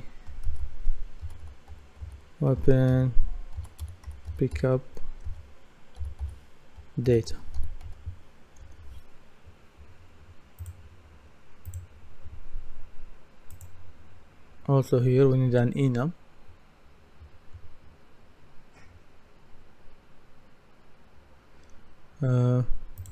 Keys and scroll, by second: 1.0-9.1 typing.